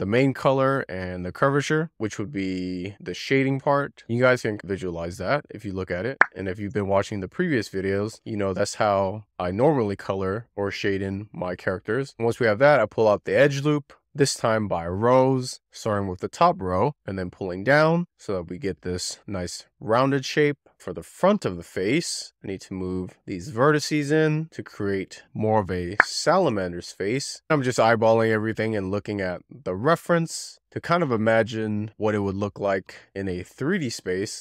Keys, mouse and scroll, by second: 0.2-0.6 scroll up 4, 0.6 click, 1.6-2.0 scroll down 5, 2.0 scroll up 2, 2.7 click, 3.5 click, 3.6 scroll up 1, 3.9 click, 4.0 click, 4.4 scroll down 2, 4.5 click, 5.1 ctrl+r, 5.3 click, 5.4 click, 5.6 click, 6.0 click, 6.1 click, 6.1 shift+click, 6.3 click, 6.5 click, 6.7 middle click, 6.7 2, 6.7 scroll down 1, 7.0 1, 7.0 click, 7.3 shift+click, 7.4 click, 7.7 middle click, 7.7 scroll down 1, 8.2 middle click, 8.7 click, 8.9 Tab, 9.2 scroll up 1, 9.4 click, 9.5 shift+middle click, 9.6 shift+click, 9.9 shift+click, 10.3 shift+click, 10.8 click, 11.0 shift+middle click, 11.1 scroll down 1, 11.2 shift+middle click, 11.9 shift+middle click, 12.1 1, 12.3 click, 12.3 2, 12.5 click, 12.6 shift+middle click, 13.3 middle click, 13.9 z, 14.1 shift+click, 14.3 shift+click, 14.5 shift+click, 14.6 shift+click, 14.7 ctrl+click, 14.8 scroll down 1, 14.8 shift+middle click, 15.1 click, 15.3 z, 15.5 middle click, 15.7 scroll up 2, 15.9 shift+middle click, 16.1 ctrl+click, 16.2 middle click, 16.5 scroll down 2, 16.7 click, 16.9 middle click, 17.1 click, 17.3 middle click, 17.6 click, 17.7 middle click, 18.3 middle click, 18.4 scroll up 1, 18.6 click, 18.8 middle click, 19.1 click, 19.2 scroll up 1, 19.3 click, 19.4 middle click, 20.0 click, 20.1 middle click, 20.2 scroll down 1, 20.4 middle click, 20.7 n, 20.8 click, 21.7 click, 21.8 click, 22.3 click, 22.5 click, 23.1 click, 24.9 click, 25.1 middle click, 25.7 scroll up 2, 25.8 middle click, 27.3 click, 27.4 middle click, 27.7 scroll down 2, 27.9-29.1 middle drag, 29.1 click, 29.2 click, 29.9 z, 30.1 click, 30.7 middle click, 30.8 scroll up 1, 31.3 z, 31.3 shift+middle click, 31.9 scroll up 1, 32.2 middle click, 32.3 scroll down 5, 32.5 shift+middle click, 33.4 scroll up 1, 33.5 shift+middle click, 34.0-34.4 scroll up 2, 34.1 middle click.